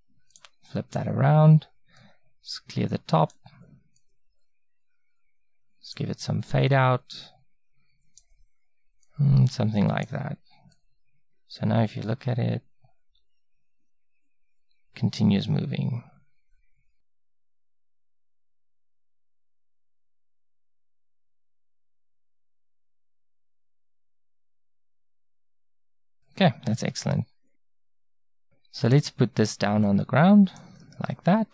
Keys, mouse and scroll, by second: 0.4-5.2 drag, 26.9-28.4 middle drag, 28.4 click, 31.2 middle click.